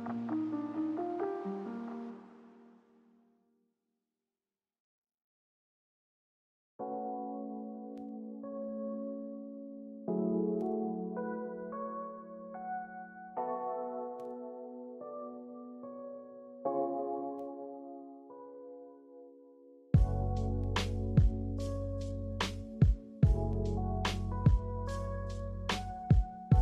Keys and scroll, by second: 11.3 g, 17.2 a.